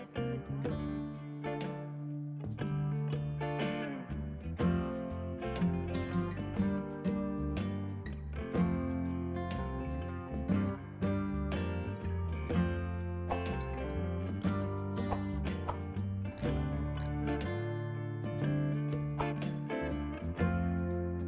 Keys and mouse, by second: 1.7 click, 4.8 v, 5.2 click, 6.8 e, 7.3 click, 9.2 ctrl+q, 9.6 click, 10.0 click, 10.2 Delete, 10.7 click, 11.0 right click, 11.6 click, 12.4 click, 18.8 click, 19.3 a, 19.4 click, 20.3 KP_1, 20.6 KP_Decimal, 20.7 Return, 21.2 click.